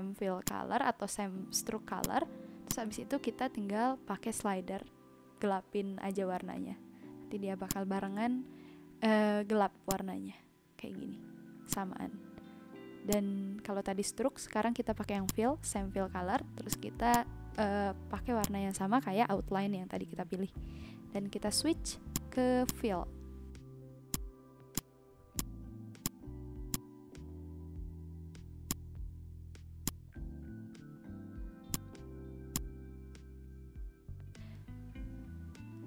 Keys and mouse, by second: 0.4 click, 2.0 click, 5.7 ctrl+z, 7.6 click, 9.8 click, 11.7 click, 13.0 click, 15.2 click, 16.6 click, 18.4 click, 22.1 click, 23.7 v, 24.1 click, 28.6 click, 29.8 click, 31.7 click, 32.5 click.